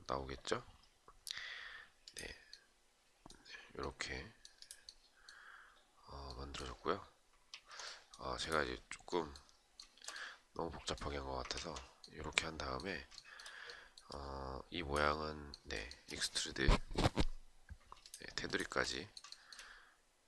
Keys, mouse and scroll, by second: 7.0 ctrl+z, 9.3 shift+right click, 12.7 shift+right click, 15.4 shift+right click, 17.6 shift+click, 17.9 shift+click, 18.9 shift+right click.